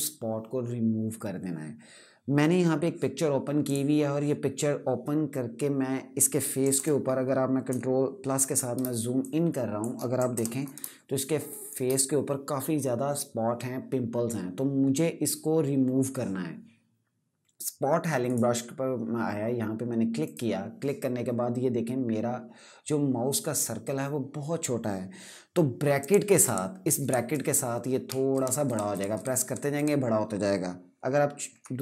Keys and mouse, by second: 3.4 click, 6.5 KP_Add, 8.5 space, 8.9 click, 9.0 space, 10.0 KP_Add, 10.5 space, 10.9 click, 11.0 space, 18.0 right click, 19.9 click, 25.7 click, 26.2-29.5 typing, 31.2-31.8 typing.